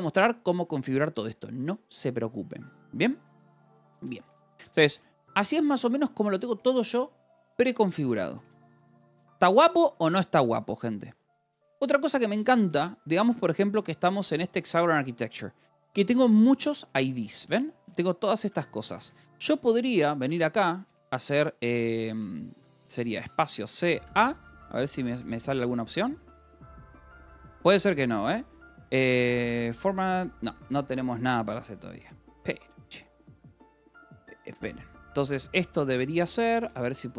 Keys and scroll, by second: 0.3 Escape, 3.8-12.6 typing, 7.2 Escape, 11.7 Return, 12.2 Return, 14.1 Return, 14.7 j, 16.6 Escape, 17.0 j, 18.2 v, 18.8 k, 20.0-22.1 typing, 22.5 Escape, 23.1-26.7 typing, 24.9 Escape, 30.1 Escape, 30.5 space, 32.3 c, 33.7 Escape, 35.0 shift+Escape, 35.4 u, 35.6 :, 36.3 k, 36.5 Return.